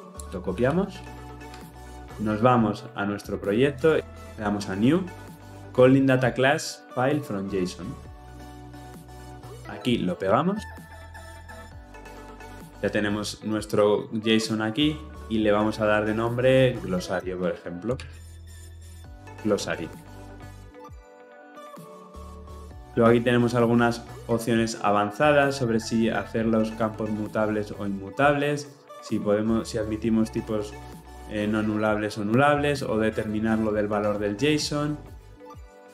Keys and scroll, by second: 10.6 ctrl+v.